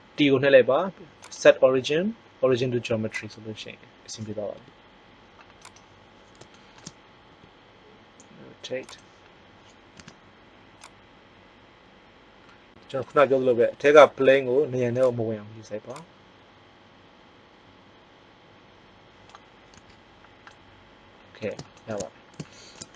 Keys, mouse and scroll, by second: 1.1-1.8 drag, 4.5 r, 7.2 r, 9.2-10.0 drag, 9.9 z, 11.9 click, 13.7 r, 19.7 z.